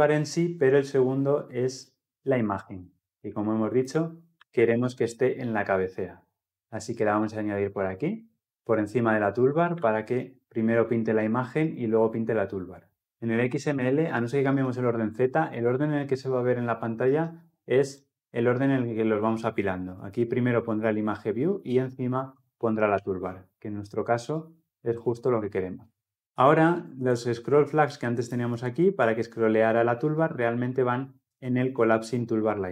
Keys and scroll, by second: 4.1 ctrl+x, 9.5 ctrl+v.